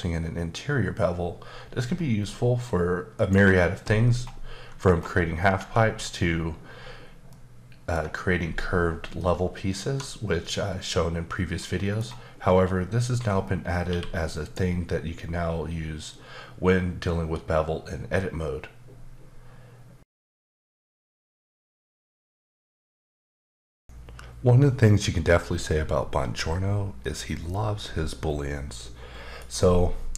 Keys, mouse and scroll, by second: 1.4-3.1 scroll up 7, 3.1 click, 4.2-5.1 scroll up 1, 5.5 Tab, 7.3 middle click, 9.2 middle click, 12.0-12.6 scroll up 1, 13.8 q, 14.4 click.